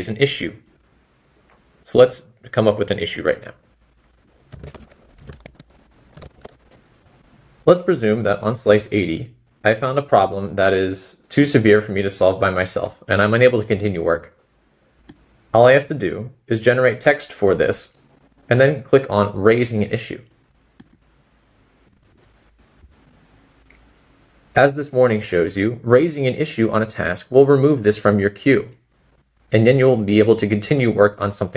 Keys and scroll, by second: 22.4 typing.